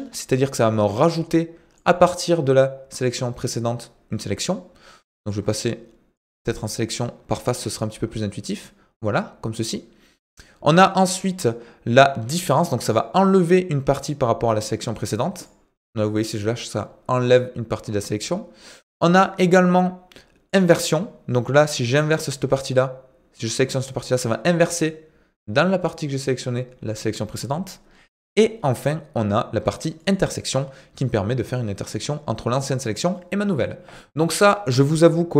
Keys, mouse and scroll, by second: 0.8-1.8 drag, 5.3 click, 6.2 click, 7.2 click, 8.3 click, 12.9 click, 14.0-15.5 drag, 20.6 click, 21.9-24.3 drag, 30.1 click, 31.1 click, 34.7 click.